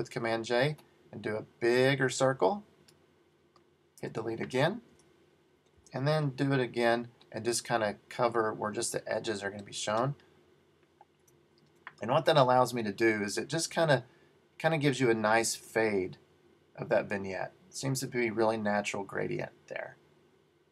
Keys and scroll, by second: 4.1 BackSpace, 5.0 super+d, 5.9 super+j, 11.3 BackSpace, 13.8 super+d.